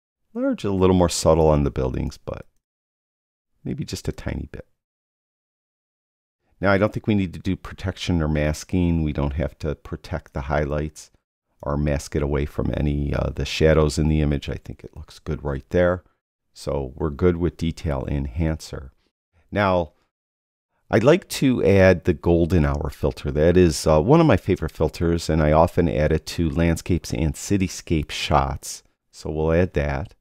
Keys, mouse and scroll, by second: 4.5 click, 7.6 click, 8.7 click, 11.0 click.